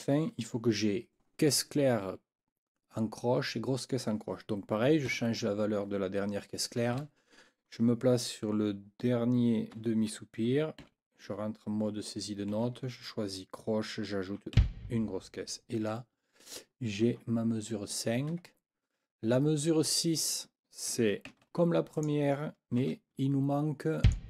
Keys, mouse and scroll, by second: 5.1 4, 6.9 Right, 10.8 n, 12.5 4, 14.5 b, 18.3 Escape, 20.2 click, 21.3 ctrl+c, 21.9 click, 22.8 ctrl+v, 24.0 click.